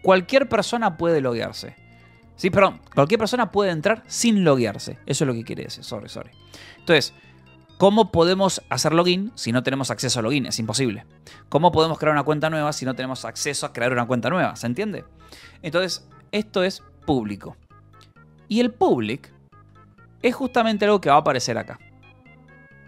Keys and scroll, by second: 6.0-6.9 typing, 8.6 Return, 11.8 j, 12.0 Return, 15.8 k, 16.8 k, 19.5-21.5 typing.